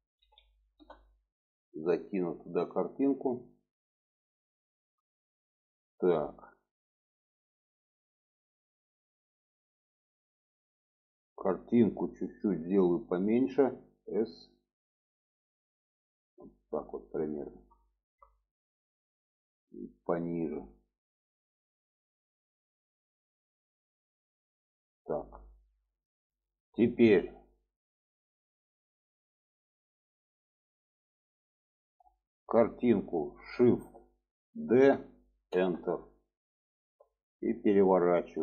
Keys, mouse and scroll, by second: 2.7 click, 3.2-4.3 drag, 5.6 middle click, 6.6 middle click, 10.0 click, 13.3 s, 17.9 shift+middle drag, 19.3 click, 29.9-31.4 middle drag, 34.5 shift+d, 36.2-37.3 middle drag.